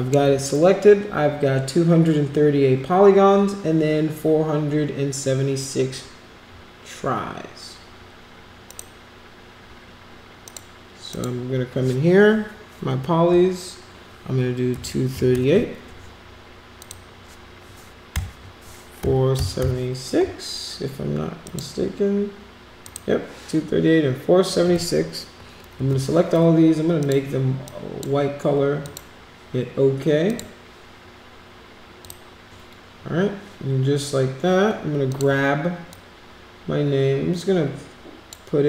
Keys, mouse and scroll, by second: 8.7 click, 10.4 click, 11.1 click, 15.1 3, 16.8 click, 19.0 4, 21.4 click, 22.8 click, 27.0 click, 27.6 click, 28.8 click, 30.3 click, 32.0 click, 35.1 click, 35.9-38.3 drag.